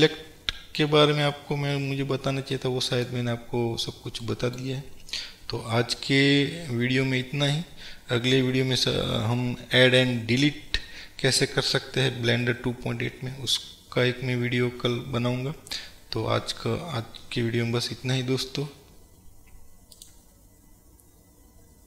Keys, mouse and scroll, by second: 1.2-2.6 scroll up 2, 3.5-4.3 scroll down 2.